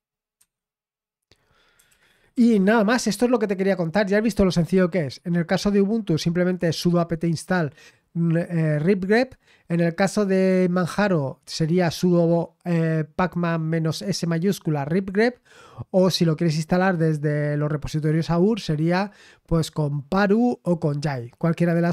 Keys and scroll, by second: 0.4 Escape, 1.6-2.8 typing, 4.2 typing.